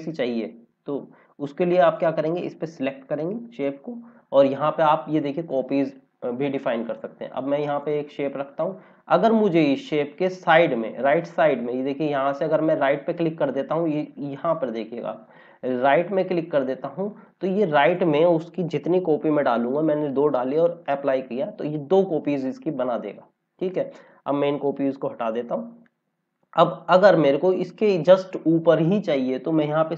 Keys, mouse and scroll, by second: 1.8 click, 5.1 click, 6.2-6.9 scroll down 1, 6.9 click, 12.6 click, 19.5 KP_2, 20.7 click.